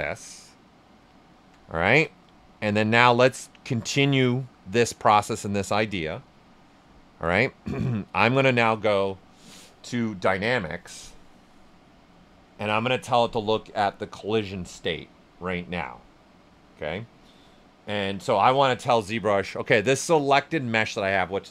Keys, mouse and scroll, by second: 10.3 click, 18.5 click.